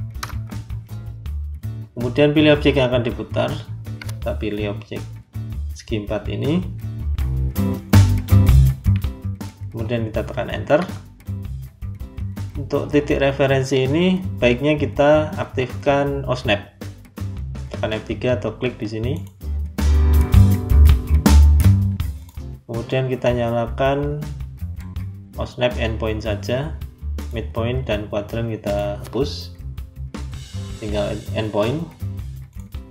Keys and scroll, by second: 0.1 Return, 10.7 Return.